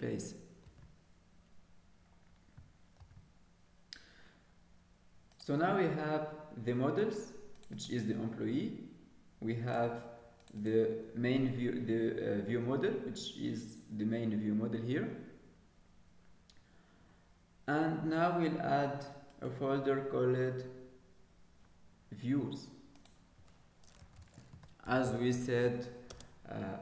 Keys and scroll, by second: 0.6 ctrl+s.